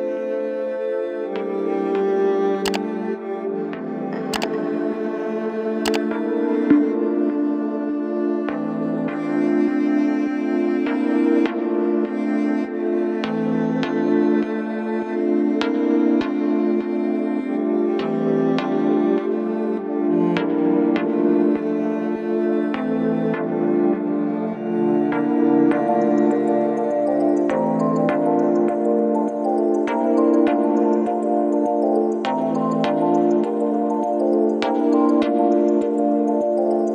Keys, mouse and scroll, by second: 1.4 click, 1.4 click, 3.9-36.9 drag.